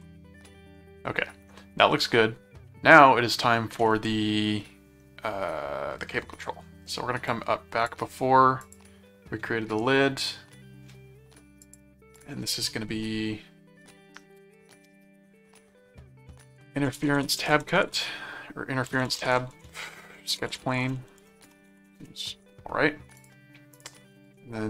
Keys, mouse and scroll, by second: 0.8 middle click, 3.8-6.0 middle drag, 7.3 click, 8.6 click, 11.6 click, 16.2-22.4 typing, 23.2 click, 23.7 click.